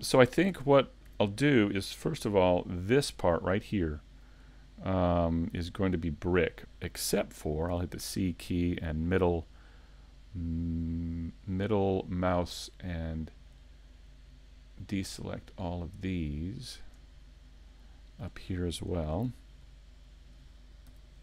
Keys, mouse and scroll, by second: 0.5 ctrl+Tab, 2.2 l, 3.1 middle click, 17.2 middle click, 18.9 shift+middle click, 19.7 middle click, 20.9 c.